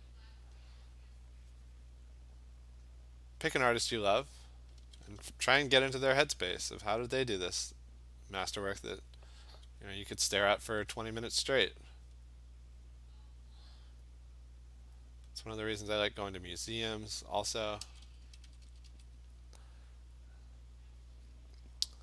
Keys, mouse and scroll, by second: 0.1 alt+click, 0.4 click, 0.6 click, 1.0 click, 2.0 click, 3.7 click, 5.7 [, 5.9 [, 6.1 [, 7.6 click, 8.7 click, 9.5 click, 10.8 alt+click, 11.2 alt+click, 13.7 click, 14.7 click, 15.1 click, 15.8 alt+click, 16.7 click, 17.1 click, 17.7 click, 17.8-18.9 typing, 18.8 click, 19.3 click, 19.5 click, 20.1 click, 21.5 click.